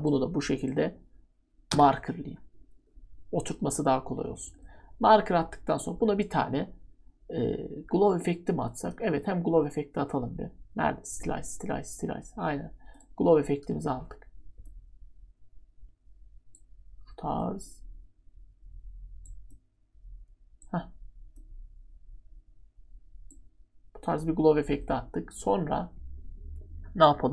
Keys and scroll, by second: 1.7 *.